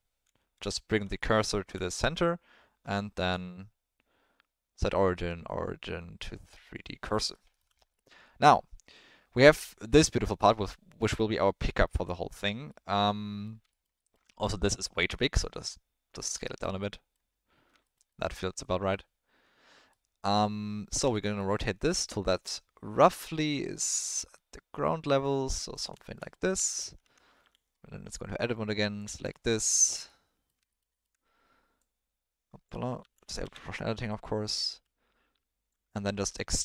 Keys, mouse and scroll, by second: 0.2 shift+s, 1.1 ctrl+middle click, 2.8 Tab, 7.3 ctrl+middle drag, 7.9 middle click, 12.6-13.4 middle drag, 13.9 alt+middle drag, 15.0 s, 16.8-17.2 drag, 17.8 alt+middle click, 18.7-19.0 middle drag, 20.0 middle click, 21.1 alt+middle click, 21.8 r, 26.0 shift+middle click, 26.7 shift+middle click, 27.0 Tab, 27.4 1, 29.3 ctrl+middle click, 30.1 middle click, 30.9 alt+click, 31.8 click, 33.0 ctrl+z, 33.4 o, 34.1-35.7 drag, 35.9 e.